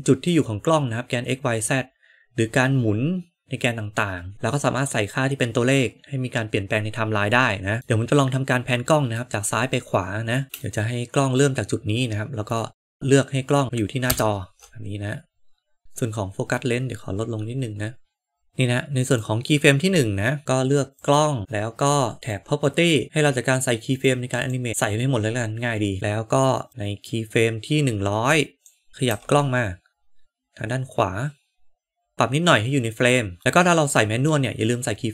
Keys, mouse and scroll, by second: 7.8-9.2 middle drag, 10.6 middle click, 15.8-19.2 drag, 21.0 click, 22.2 click, 24.0 click, 24.3 click, 26.7-28.7 drag, 28.9 g, 32.1-33.4 shift+middle drag.